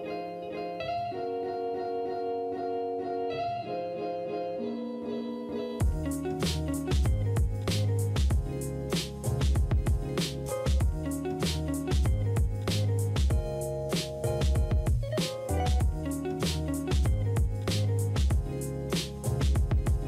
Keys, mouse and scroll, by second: 4.0 space, 4.9 space, 6.2 space, 8.3 space, 10.2 typing, 14.5 ctrl+z, 15.1 right click, 18.2-19.3 typing.